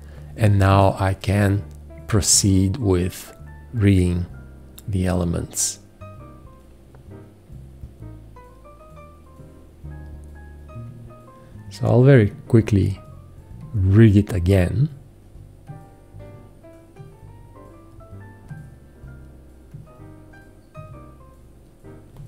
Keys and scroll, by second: 0.7 F4.